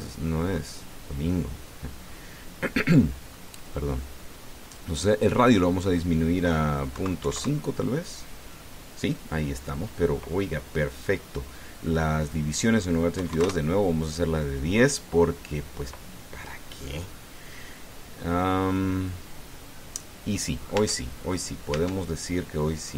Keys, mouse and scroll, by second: 0.9-1.2 scroll down 2, 2.1-2.5 scroll down 2, 2.8-3.2 scroll up 2, 4.1 scroll up 2, 5.9 click, 7.7 KP_Decimal, 8.0 KP_5, 8.2 KP_Enter, 13.0 click, 14.0 KP_1, 14.1 KP_0, 14.2 KP_Enter, 15.8-16.2 scroll down 1, 18.3-18.9 scroll down 1, 20.3-20.6 scroll down 2, 20.8-21.2 scroll down 2, 21.6 Tab, 22.5 Tab.